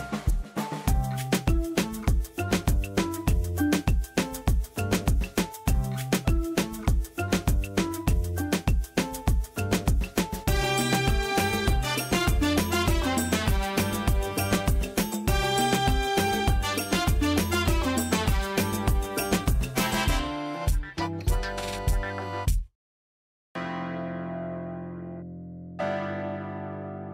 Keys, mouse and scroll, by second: 2.8-4.3 click, 12.9 click, 13.3 right click, 13.3 right click, 14.0 click, 15.3 right click, 15.9-18.3 drag.